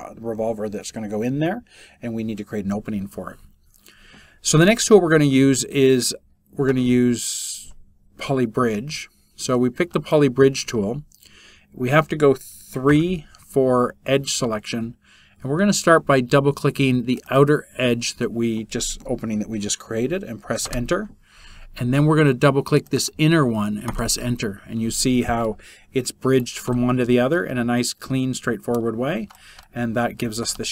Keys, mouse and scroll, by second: 20.1 Return, 23.6 Return.